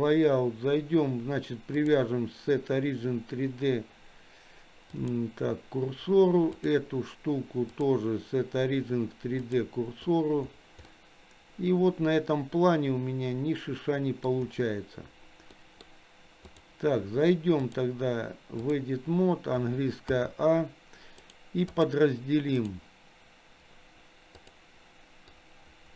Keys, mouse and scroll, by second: 0.0 click, 1.8-5.1 drag, 6.6 click, 7.7-9.6 drag, 10.9-14.3 middle drag, 15.6 middle click, 16.5 click, 17.7-18.8 drag, 20.1 a, 21.2 right click, 22.6-23.7 right drag, 25.3-25.9 drag.